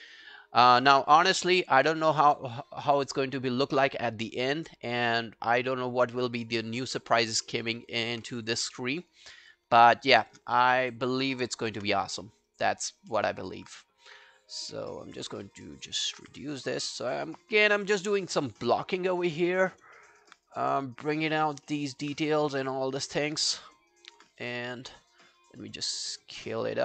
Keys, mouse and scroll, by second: 0.1 alt+middle click, 0.6 alt+right click, 6.3 scroll up 2, 6.6 alt+middle click, 6.9 alt+right click, 7.2 alt+click, 7.5 alt+middle click, 7.7 alt+right click, 7.9 alt+click, 8.3 q, 8.5 right click, 10.0 shift+click, 10.2 shift+click, 10.6 alt+middle click, 10.8 alt+right click, 11.0 alt+click, 12.2 alt+middle click, 12.5 alt+right click, 12.8 alt+click, 13.1 alt+middle click, 13.4 alt+right click, 15.4 w, 15.5 alt+middle click, 15.7 alt+right click, 15.9 alt+click, 16.2 alt+q, 16.5 right click, 17.5 scroll down 4, 17.9 alt+click, 18.3 alt+scroll up 3, 18.5 alt+click, 19.1 alt+middle click, 19.4 alt+scroll down 1, 19.6 alt+click, 20.0 alt+middle click, 20.6 alt+right click, 21.6 alt+middle click, 21.9 alt+click, 23.3 alt+middle click, 23.5 alt+right click, 23.7 alt+click, 24.2-24.9 typing, 26.6 alt+click.